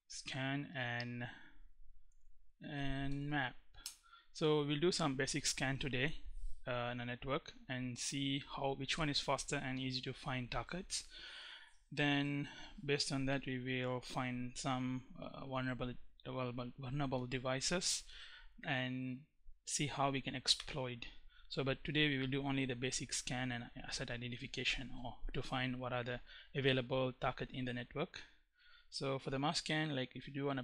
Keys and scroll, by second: 1.4-3.3 typing, 3.4 Return.